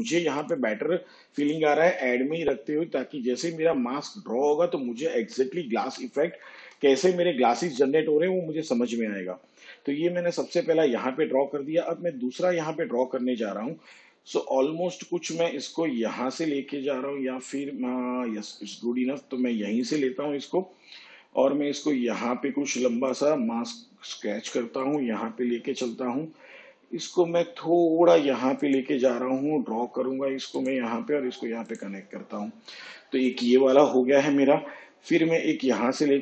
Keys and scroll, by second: 6.5 shift+/.